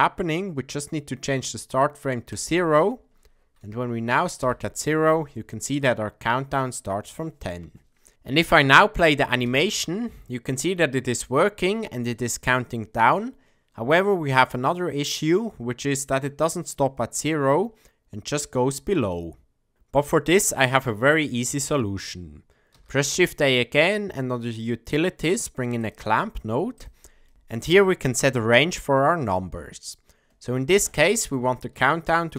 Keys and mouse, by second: 2.4 click, 4.4 Left, 8.1 shift+Left, 8.1 space, 9.3 space, 14.4-16.2 middle drag, 22.7 shift+a, 30.9-32.3 drag.